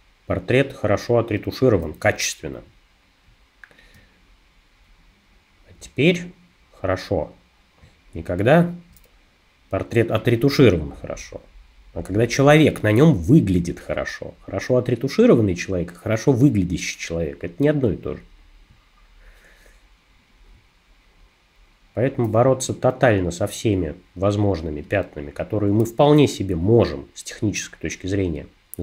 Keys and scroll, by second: 22.5 space, 26.1 space.